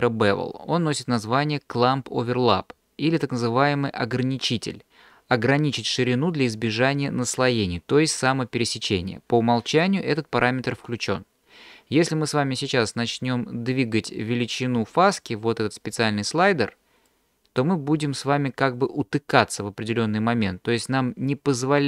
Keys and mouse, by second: 17.2-21.8 drag.